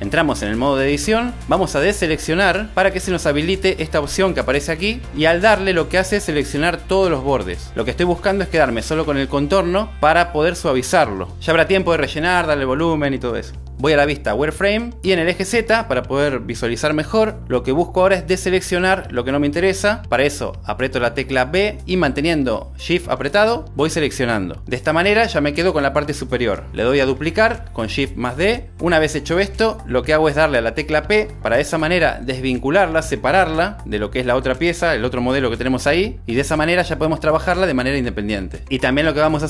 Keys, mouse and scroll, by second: 1.5 click, 3.2 alt+a, 3.7-5.9 drag, 21.8 b, 28.2 shift+d, 29.3 click, 30.2 g, 30.4 click, 31.4 p, 36.6 Tab.